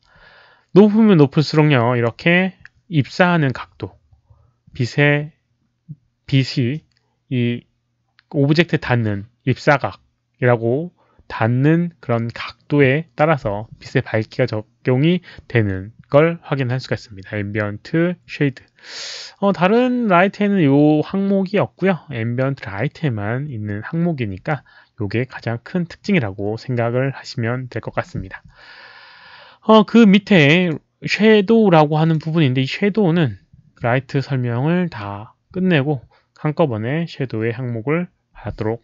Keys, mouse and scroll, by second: 1.3-2.0 drag, 30.5 click, 32.0 click.